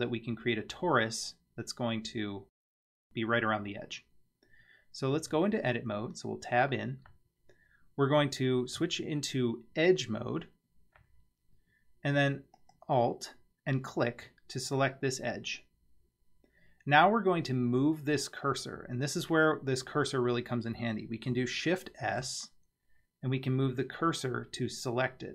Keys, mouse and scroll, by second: 3.6-5.2 scroll down 1, 5.2 Tab, 8.8 2, 12.6 alt+click, 22.1 shift+s.